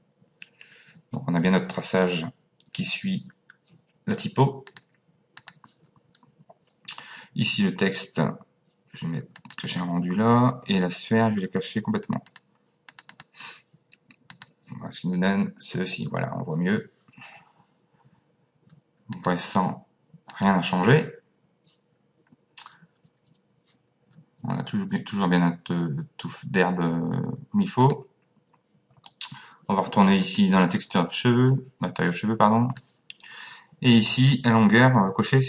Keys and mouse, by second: 4.7 click, 9.4 click, 12.0 click, 14.3 click, 19.1 click, 20.3 click, 27.8 click, 30.2 click, 31.5 click.